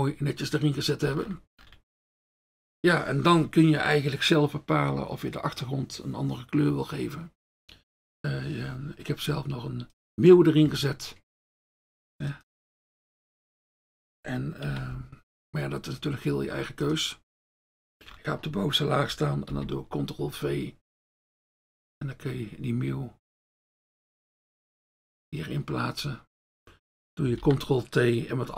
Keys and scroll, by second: 14.7 ctrl+x, 19.5 ctrl+v, 27.4 ctrl+t.